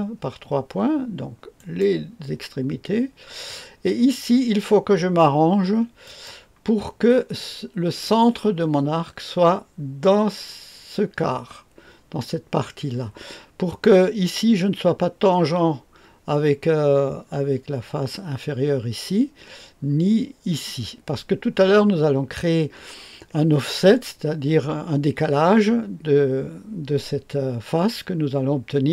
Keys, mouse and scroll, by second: 1.5 click, 6.0 click.